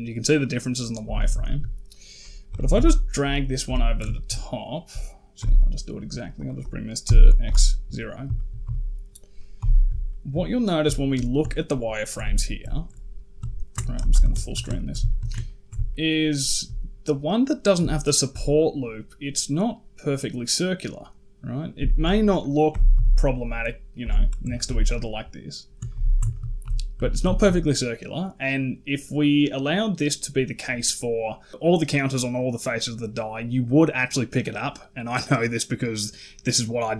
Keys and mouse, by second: 0.2 click, 0.9 z, 1.3 shift+drag, 2.3 g, 3.9 shift+middle drag, 5.2 n, 6.2-7.3 drag, 8.2 shift+middle drag, 8.4 z, 9.4 n, 9.9 shift+middle drag, 10.8 shift+middle drag, 11.4 ctrl+middle click, 12.2 shift+middle drag, 13.8 shift+space, 14.3 shift+middle click, 14.6 ctrl+middle click, 14.9 shift+middle click, 15.3 ctrl+middle drag, 15.7-16.3 shift+middle drag, 17.8 shift+middle drag, 21.7 shift+middle drag, 22.5 g, 24.3 shift+click, 24.5 z, 25.7 ctrl+z, 26.1 shift+drag, 26.4 z, 26.8 z, 27.2 shift+middle drag.